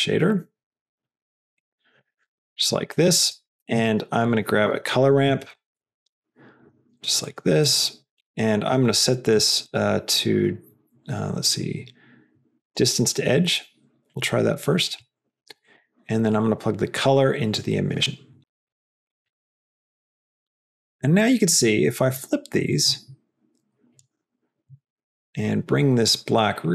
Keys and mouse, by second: 1.9 click, 2.3 middle click, 2.9 middle click, 3.2 middle click, 3.5 shift+a, 7.5 click, 8.9 click, 9.6-13.0 drag, 13.8-14.4 drag, 14.9 click, 15.6 middle click, 16.2-17.9 drag, 19.3-22.4 drag, 23.1-24.3 drag, 25.0 click.